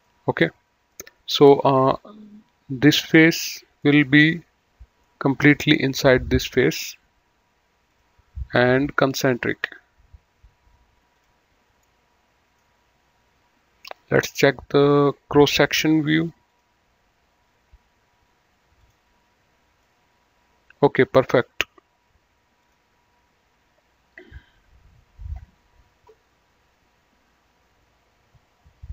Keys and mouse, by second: 2.6 click, 4.1 middle click, 5.0 middle click, 6.1 click, 7.7 click, 11.1 click, 11.7 middle click, 14.7 click, 16.4 click, 18.7 click, 19.8 middle click, 22.5 click.